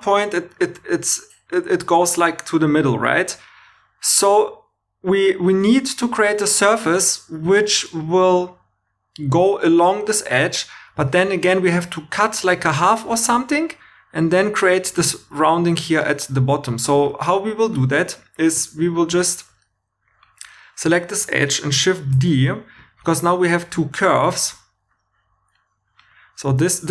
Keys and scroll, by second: 5.6 2, 22.1 shift+d.